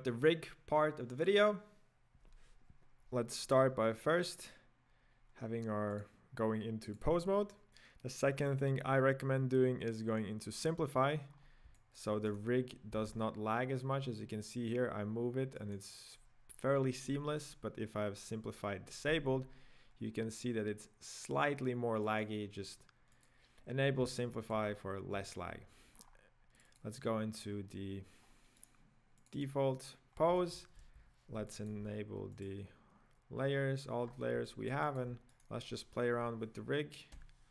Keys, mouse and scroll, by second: 4.3 click, 5.9-9.1 drag, 10.6 click, 11.4 scroll up 3, 11.8-12.5 shift+middle drag, 12.5 right click, 13.1 g, 17.7 click, 19.6 g, 23.3 click, 24.1-24.8 shift+middle drag, 24.8-26.0 scroll up 2, 26.0-26.5 scroll up 9, 26.5 click, 26.8 click, 28.3-28.8 scroll down 3, 28.8 right click, 29.2 click, 30.2 scroll down 1, 30.4 shift+middle click, 30.8 n, 31.5 shift+middle click, 32.3 click, 32.8-34.0 scroll down 6, 34.0 scroll up 5, 34.5-35.5 shift+middle drag, 35.5 right click, 36.2 KP_Decimal, 37.2 KP_5.